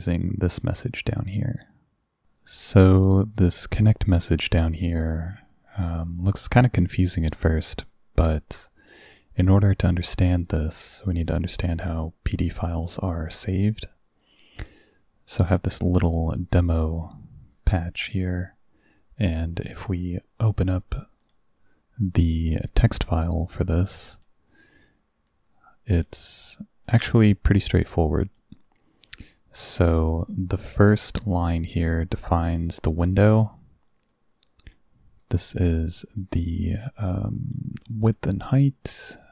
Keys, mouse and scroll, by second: 12.8 click, 14.7 click, 15.6 click, 21.3 click, 24.2 click, 25.4 click, 26.9-28.4 drag, 29.4 click, 31.7 click, 34.1-34.8 drag, 36.3 click, 36.9 click, 38.2 click.